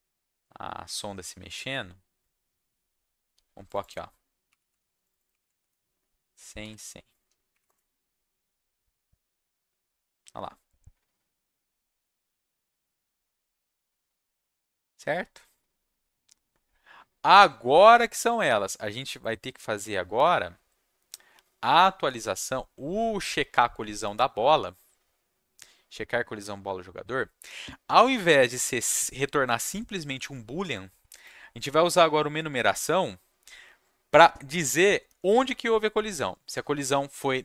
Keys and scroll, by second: 6.6 ctrl+s, 7.5 Up, 7.6 Return.